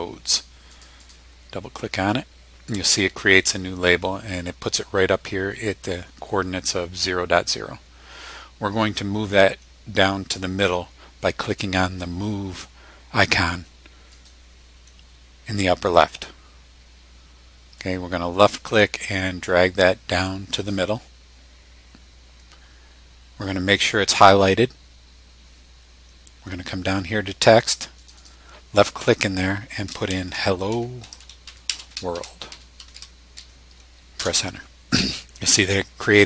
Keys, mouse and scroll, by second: 0.7 click, 14.1 click, 17.8-20.9 drag, 27.9 click, 30.1-33.9 typing, 34.2 Return.